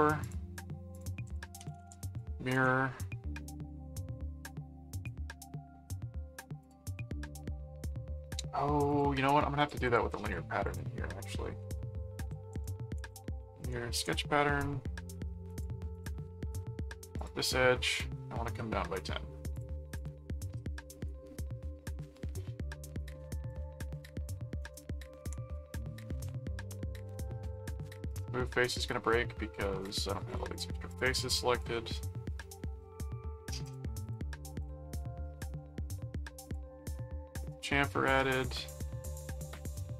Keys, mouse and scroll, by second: 0.2 click, 0.9 click, 1.0-2.3 typing, 2.5 Return, 6.6 click, 8.9 click, 9.6-11.2 drag, 11.4 ctrl+a, 12.3-13.6 typing, 14.0 Return, 15.5 click, 17.2 click, 19.5 click, 20.9 right click, 22.1 click, 23.0 click, 26.1 click, 27.5 click, 28.1 click, 28.7 click, 30.1-31.5 drag, 31.7 click, 31.7 middle click, 32.4 middle click, 33.1 middle click, 33.6-35.2 drag, 34.9 right click, 35.5 middle click, 36.4 click, 37.9 middle click, 39.0 click, 39.7 right click.